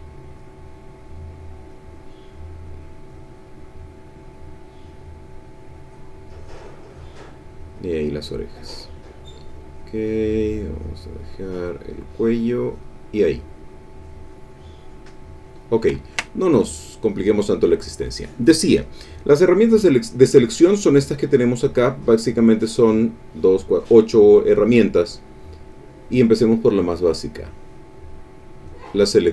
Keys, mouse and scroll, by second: 0.1 click, 0.6-2.2 drag, 2.9-5.1 drag, 5.5-7.9 drag, 8.6-10.1 drag, 10.3 click, 11.2 click, 12.3 click, 13.9 click, 14.6-15.8 drag, 15.9 ctrl+middle click, 15.9 ctrl+scroll up 1, 16.1 ctrl+click, 16.4-17.6 ctrl+drag, 25.5 click, 27.3-28.8 drag.